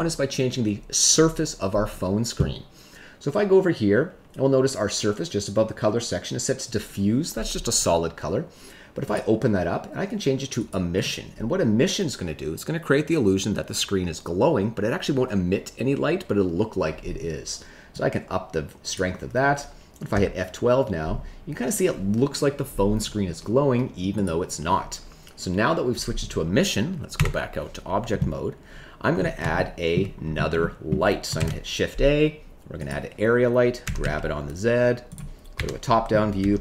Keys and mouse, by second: 9.2-10.7 drag, 18.0 click, 20.4 F12, 27.1 Tab, 29.5 shift+middle click, 30.6 middle click, 31.3 shift+a, 33.8 g, 34.0 z, 35.0 click, 35.5 KP_7, 36.3 g.